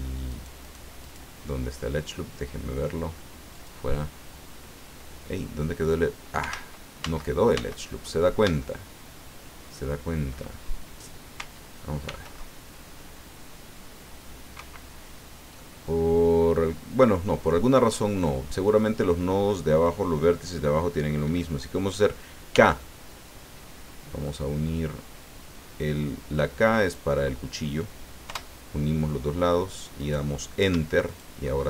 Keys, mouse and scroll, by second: 0.3 alt+right click, 1.0 alt+right click, 3.5 click, 4.7 scroll down 2, 6.5 ctrl+z, 8.6-10.5 shift+middle drag, 10.6 shift+scroll up 2, 12.0 ctrl+r, 14.5 Escape, 15.5-18.4 drag, 22.5 k, 24.3 click, 26.8 click, 28.2 Return, 30.0 right click, 31.1 shift+right click.